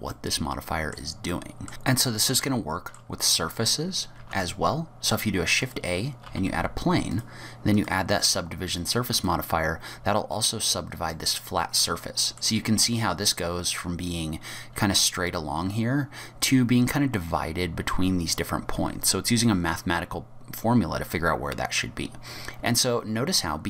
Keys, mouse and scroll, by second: 0.1 middle click, 1.3 middle click, 1.7 Delete, 1.7 click, 1.7 scroll down 1, 1.8 middle click, 2.4 shift+middle click, 4.2 shift+a, 6.3 g, 7.8 click, 11.1 middle click.